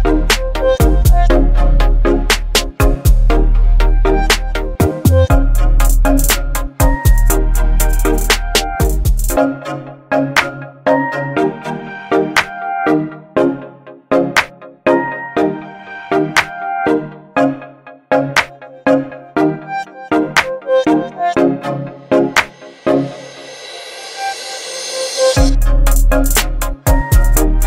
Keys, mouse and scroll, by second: 0.3 ctrl+v, 1.4 ctrl+a, 2.7 click, 9.4 click, 11.1 v, 11.4 ctrl+t, 13.3-17.0 drag, 21.8 ctrl+t, 24.1 click, 26.6-27.6 drag.